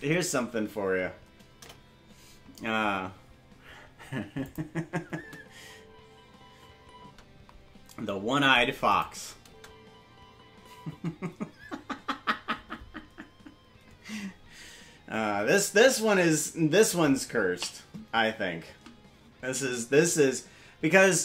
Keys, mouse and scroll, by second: 1.5 KP_0, 4.4 click, 5.1 space, 7.8 space, 8.9 click, 9.4 space, 12.1 space.